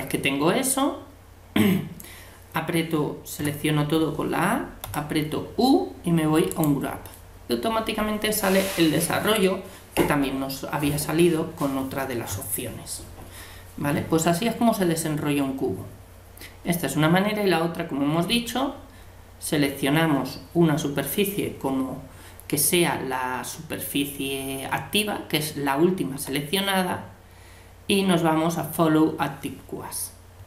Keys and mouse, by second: 3.4 a, 4.8 u, 26.2 u.